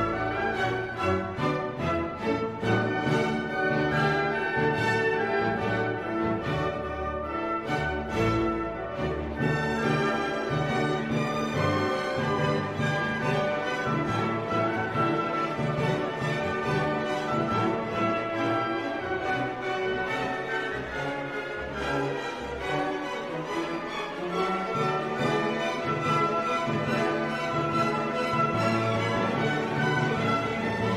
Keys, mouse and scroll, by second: 1.0 p, 2.2 BackSpace, 3.5-6.3 typing, 7.3 click, 8.4-11.7 drag, 11.7-15.7 drag, 15.7 0, 16.3 scroll down 1, 16.8 scroll up 2, 18.3 click, 20.3 space, 24.1 click, 25.1 click, 26.1 click, 27.2 1, 27.6 3, 28.3 click, 29.4 3, 29.9 0, 30.7-30.9 scroll down 6.